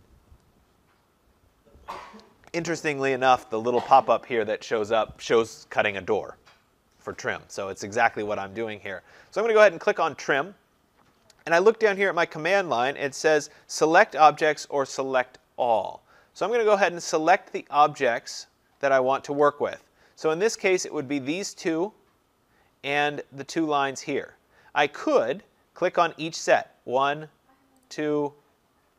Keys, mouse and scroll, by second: 10.4-15.5 drag, 26.5 click, 27.9 click.